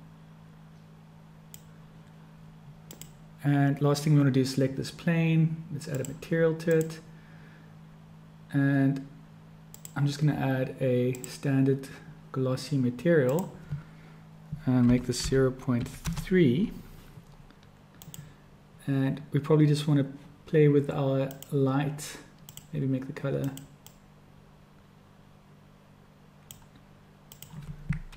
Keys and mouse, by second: 2.7 click, 5.9 click, 6.8 click, 9.6-11.4 drag, 13.4-17.0 drag, 17.9 click, 21.1-21.7 drag, 22.5-23.4 drag, 27.3-28.1 drag.